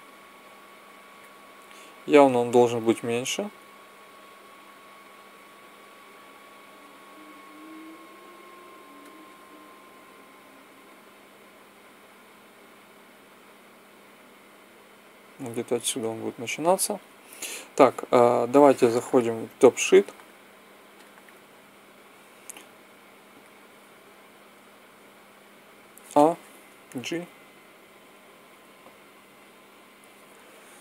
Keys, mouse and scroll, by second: 0.2-1.5 drag, 2.9-5.7 drag, 5.7 s, 10.6-12.4 drag, 12.4-14.3 middle drag, 18.2 click, 25.9 a, 26.6 g, 27.0-27.8 Right, 28.4 Escape.